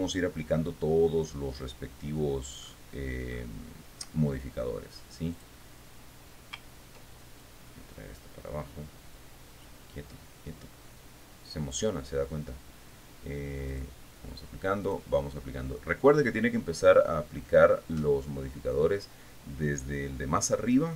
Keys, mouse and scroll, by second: 1.7-2.4 scroll down 1, 2.9-4.2 scroll up 4, 5.6 click, 7.7 ctrl+click, 8.4-12.5 drag, 13.9 click, 15.1 click.